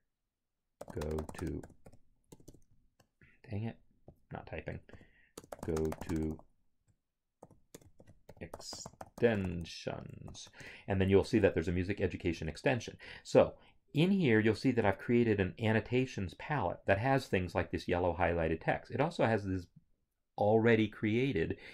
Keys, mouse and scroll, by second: 0.8-2.3 typing, 4.1 click, 4.9-6.3 typing, 7.4-10.2 typing, 10.6 Return, 12.3 alt+Tab, 14.8 click.